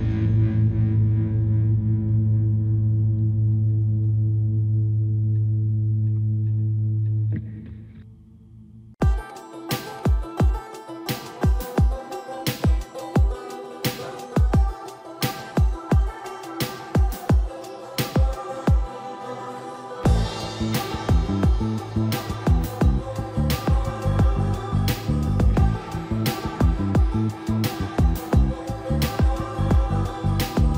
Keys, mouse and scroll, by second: 0.5-1.4 typing, 2.6 |, 4.1-7.6 typing, 5.6 click, 7.6 click, 12.7 typing, 13.4 Escape, 13.7 typing, 15.2-16.8 typing, 16.9 click, 18.3 scroll up 1, 18.6 scroll down 1, 22.1-24.3 typing, 24.5 click, 27.3 |, 28.9-30.5 scroll up 1, 30.2-30.7 typing.